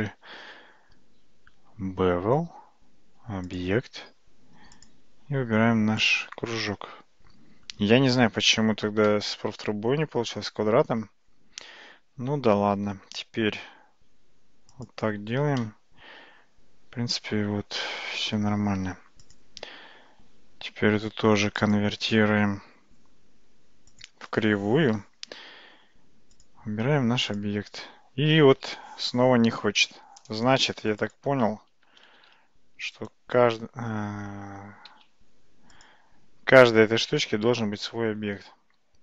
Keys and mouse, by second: 3.5 click, 9.1-11.1 middle drag, 12.7 g, 15.7-18.3 middle drag, 19.3 click, 21.7-24.1 drag, 31.0 click, 32.2 shift+d, 34.9 g.